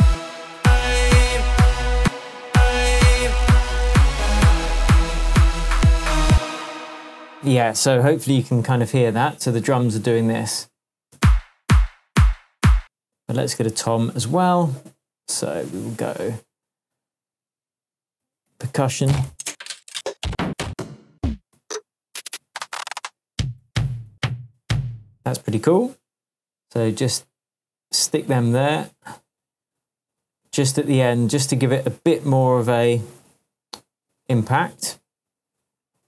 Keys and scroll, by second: 0.0 space, 1.9 space, 6.3 space, 8.1 super+t, 11.1 super+space, 12.0 space, 12.7 space, 18.2 Down, 18.4 Right, 18.8 Right, 18.9 Down, 23.6 Up, 24.5 Down.